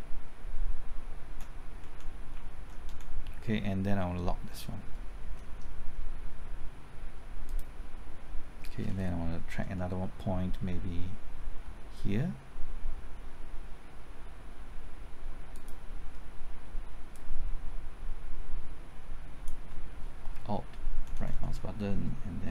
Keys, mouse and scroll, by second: 1.7 Right, 1.7 typing, 2.3 Left, 2.9 Right, 4.5 middle click, 7.4 click, 15.5 ctrl+click, 17.1-19.9 drag, 20.3 typing, 20.9 alt+Right, 21.1 alt+Right, 21.3 alt+Right, 21.5 alt+Right, 21.6 alt+Right.